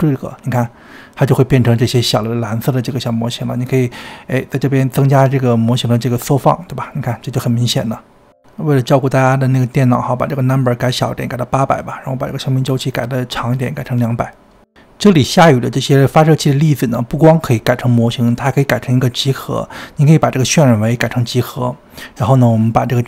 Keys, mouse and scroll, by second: 0.4 space, 1.5 space, 3.4-5.3 drag, 5.3 space, 7.0 space, 8.6 space, 10.5 click, 11.4 0, 12.4 click, 13.0 KP_0, 13.8 space, 15.1-17.0 shift+middle drag, 19.7 click, 20.6-22.0 drag, 22.4-23.0 drag.